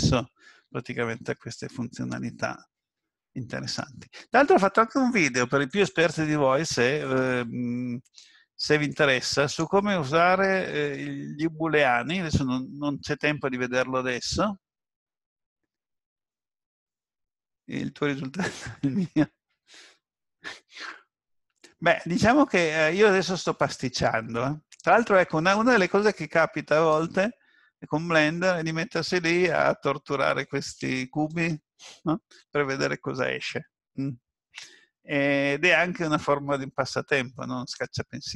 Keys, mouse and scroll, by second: 1.0 ctrl+z, 22.4-22.9 scroll up 2, 22.9-24.0 scroll down 1.